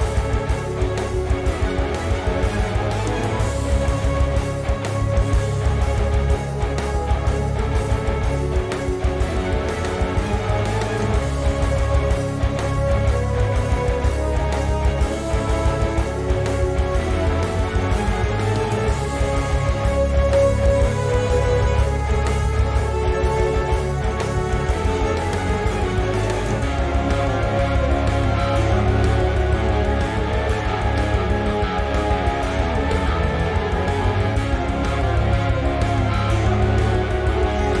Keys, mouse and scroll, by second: 0.9 click, 2.2 click, 3.4 click, 3.8 scroll down 2, 4.0 middle click, 4.9 Tab, 5.2-5.7 scroll up 2, 5.7 click, 6.1 z, 6.5 middle drag, 6.7 Tab, 7.6-9.7 drag, 9.0-9.6 scroll down 2, 9.8-10.9 scroll up 2, 10.9 click, 11.9-14.6 drag, 12.6 KP_0, 13.6 KP_Enter, 15.6 click, 15.9-19.7 middle drag, 16.4-16.8 scroll down 2, 19.1 scroll up 1, 19.7 click, 19.8 Tab, 20.8 click, 21.1-22.2 middle drag, 21.9 z, 22.2 click, 22.8 click, 23.9-24.3 drag, 24.9 click, 26.2 click, 26.7 scroll down 2, 27.0-28.0 middle drag, 27.5-28.0 scroll up 2, 28.0 drag, 28.7-30.6 drag, 29.4 Tab, 30.8 middle click, 30.8 z, 31.0-32.9 middle drag, 31.0 scroll down 2, 31.7-32.1 scroll up 2, 32.1-32.9 scroll down 2, 32.9 click, 33.8-35.8 middle drag, 33.8-34.1 scroll up 2, 34.1-34.9 scroll down 2, 34.9-35.8 scroll down 1, 35.8 click, 36.1 click, 36.4-37.8 middle drag, 36.4 scroll up 2, 37.0-37.4 scroll down 2.